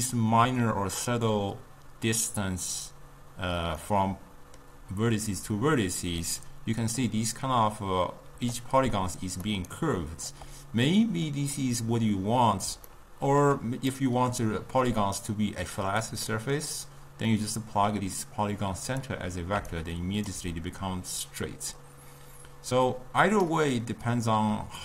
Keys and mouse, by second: 3.9-8.4 middle drag, 8.4 d, 8.6 click, 9.5 d, 9.8 right click, 10.4 d, 10.9 d, 11.0-17.4 middle drag, 17.4 drag, 19.7 d, 19.7 right click, 20.4 d, 23.0 click.